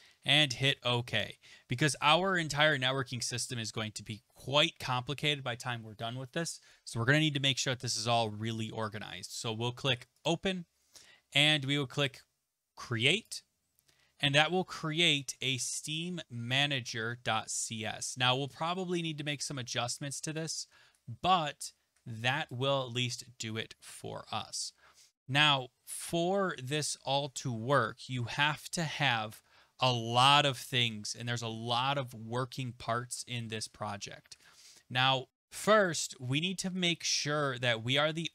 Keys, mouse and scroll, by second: 0.7 click, 1.2 click, 10.3 click, 13.3 click, 20.3 click, 22.5 click, 31.2 click, 32.1 scroll down 4, 32.3-32.8 scroll, 32.8-33.6 scroll, 33.6-34.5 scroll.